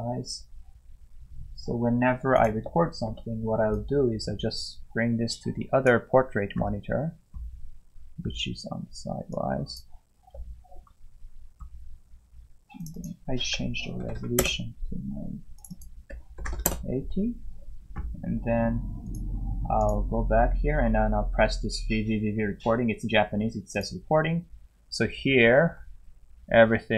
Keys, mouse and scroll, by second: 19.9 click, 23.7 click.